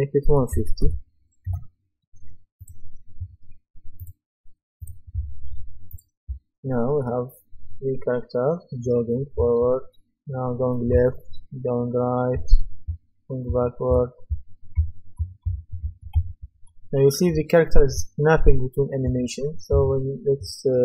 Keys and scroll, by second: 0.3 KP_1, 1.5 Return, 6.3 w, 9.4 d, 10.9 a, 12.3-16.3 typing, 19.7 Escape.